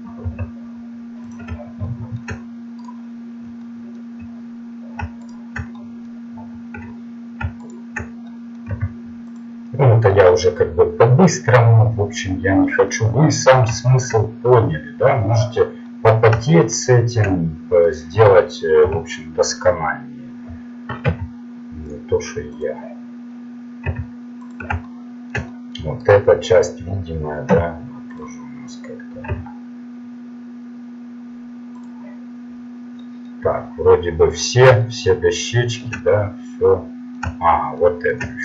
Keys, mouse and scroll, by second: 0.3 g, 1.8-2.8 middle drag, 2.8 right click, 5.8-8.1 middle drag, 8.7 u, 12.8-16.6 middle drag, 18.0 right click, 18.8 u, 21.1 s, 23.9 s, 26.1 right click, 27.5 u, 28.2 u, 29.4 s, 32.3-33.4 middle drag, 33.5 middle click, 33.7 middle click, 33.9-38.3 middle drag.